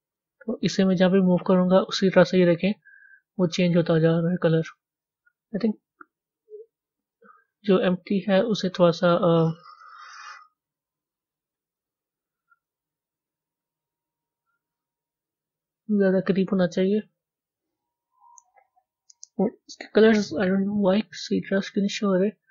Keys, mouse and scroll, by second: 0.9 g, 9.2-10.8 middle drag, 10.8 click, 11.4-13.2 middle drag, 13.2 g, 19.7 click.